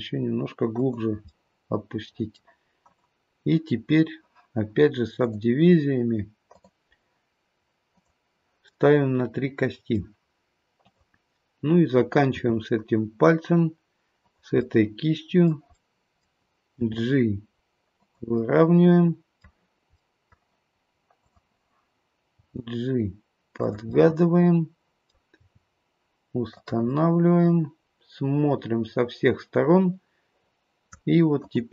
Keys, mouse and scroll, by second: 1.2 middle click, 2.8 click, 5.2 click, 8.7 click, 8.7 middle click, 10.7 click, 12.4 e, 14.6 middle click, 15.7 middle click, 16.7 g, 18.4 middle click, 19.9 middle click, 22.4 g, 23.9 middle click, 25.4 g, 26.9 middle click, 31.4 click.